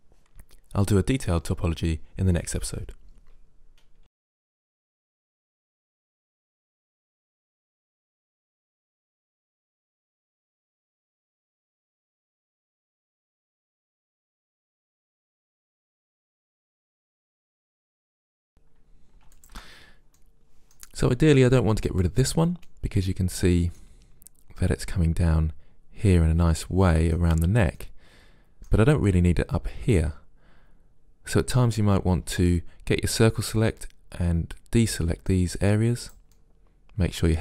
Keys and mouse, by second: 0.0 click, 1.1 ctrl+z, 1.6 click, 1.9 Delete, 2.1-3.5 middle drag, 3.5 Delete, 3.7 click, 4.4 middle click, 4.7 click, 4.9 Delete, 5.1 middle click, 6.2 middle click, 12.4 middle click, 12.8 click, 14.7 Delete, 15.0 click, 15.4 click, 15.8 click, 16.2 ctrl+z, 16.9 click, 17.2 click, 17.9 ctrl+z, 18.4 Delete, 19.4 click, 23.4 click, 23.5 click, 23.7 middle click, 27.0 middle click, 27.8-29.8 middle drag, 30.0-32.0 middle drag, 32.3 c, 36.4-37.4 middle drag.